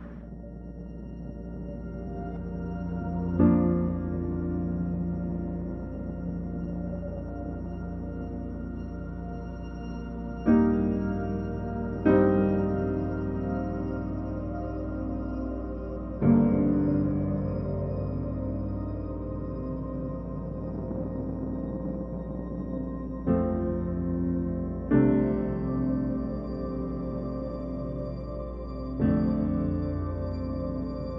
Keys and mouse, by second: 0.0 shift+middle drag, 0.4 middle click, 0.6 shift+middle click, 1.1 click, 1.8 click, 8.4 click, 8.4 right click, 8.7 g, 9.0 shift+middle click, 9.2 middle click, 9.4-10.0 shift+middle drag, 10.0 middle drag, 10.4-11.1 shift+middle drag, 11.2 shift+middle click, 11.5 Tab, 11.8 click, 12.0-14.0 typing, 12.5 click, 13.1 middle click, 13.6 click, 14.1 click, 14.4 click, 14.8 click, 15.2-20.3 typing, 15.4 click, 15.9 shift+middle click, 16.1 click, 16.4 click, 16.6 click, 16.7 middle click, 17.0 click, 17.4 click, 17.8 shift+middle click, 17.9 click, 18.4 click, 18.6 click, 18.9 shift+click, 22.3-25.3 typing, 22.4 click, 22.6 shift+middle click, 25.0 click, 25.5 alt+a, 25.5 shift+drag, 25.7 shift+click, 26.6 shift+a, 26.8 click, 27.3 middle click, 27.5 middle click, 27.8 g, 28.4 middle click, 28.7 middle click, 29.0 ctrl+alt+KP_0, 29.5 ctrl+alt+KP_0, 29.6 g, 30.5 g, 30.6 r, 31.0 shift+drag.